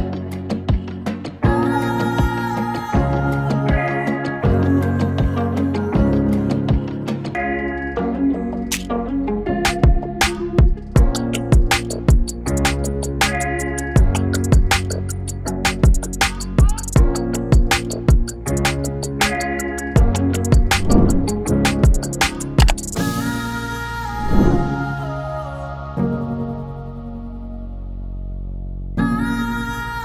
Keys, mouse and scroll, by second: 3.3 b, 3.6 space, 10.9 space, 11.7-13.3 drag, 16.0-20.2 drag, 22.9 click, 26.4-30.0 drag.